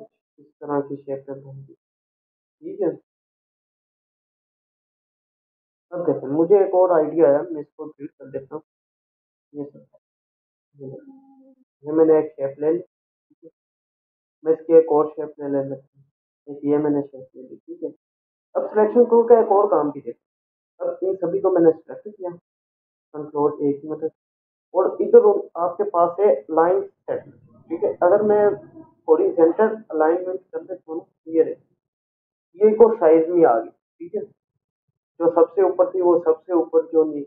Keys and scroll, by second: 7.8 ctrl+a, 9.1 Delete, 10.3 ctrl+0, 24.5 ctrl+a.